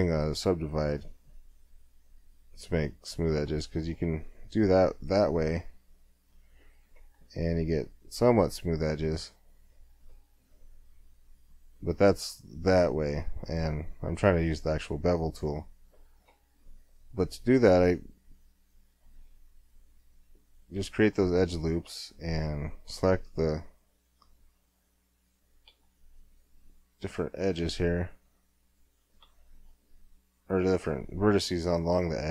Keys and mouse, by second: 0.9-3.5 drag, 3.5 Tab, 3.9-5.9 middle drag, 5.9-6.9 drag, 7.0 click, 7.2 z, 7.9 z, 8.0 click, 9.7-10.9 middle drag, 12.2-13.5 drag, 13.5-15.4 middle drag, 15.6 Tab, 17.9-18.9 drag, 19.9-22.9 middle drag, 22.9 click, 25.8-30.7 middle drag.